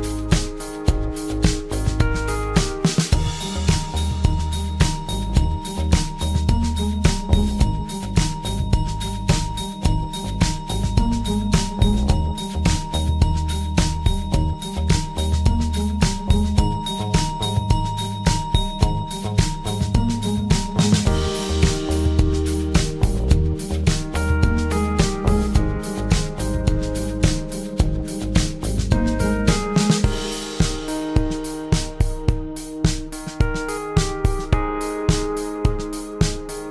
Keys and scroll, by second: 19.8 1, 20.0 Return, 21.5 super+d, 26.4 2, 26.5 Return, 29.6 typing, 31.2 typing, 33.6 d.